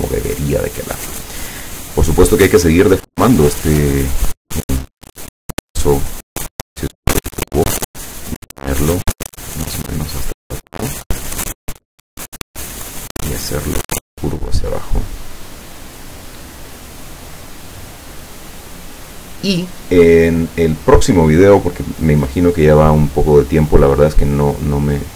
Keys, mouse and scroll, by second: 1.7 click, 3.5 click, 5.8 click, 6.8-12.1 drag, 13.3-15.2 drag.